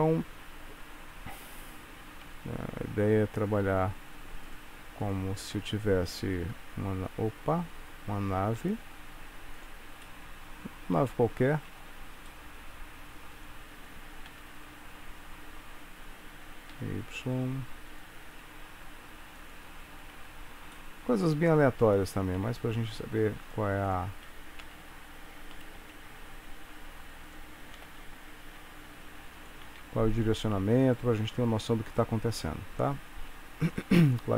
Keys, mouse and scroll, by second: 0.0 middle click, 1.6 click, 2.4 Tab, 2.9 Tab, 3.8 3, 4.5 click, 5.1 shift+click, 6.5 i, 10.1 middle click, 11.2 shift+middle click, 12.4 middle click, 13.4 click, 14.4 g, 18.4 s, 20.2 Tab, 20.8 middle click, 22.5 Tab, 23.6 click, 23.9 shift+click, 24.7 s, 27.8 g, 29.8 Tab, 30.6 scroll down 2, 33.2 Tab, 33.7 click, 34.2 shift+click.